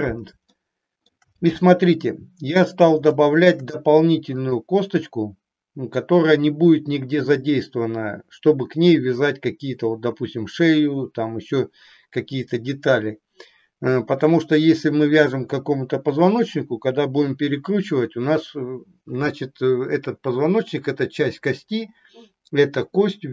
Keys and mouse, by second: 0.5 shift+middle click, 3.3 shift+middle click, 4.3 click.